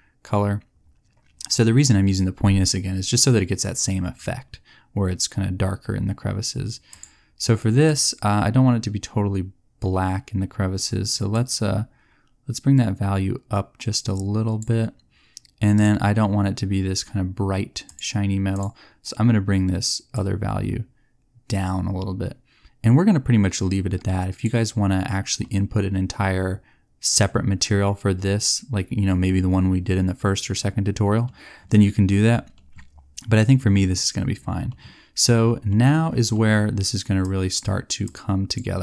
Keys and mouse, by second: 25.3-26.6 drag, 29.9-35.2 middle drag, 37.1-38.4 drag.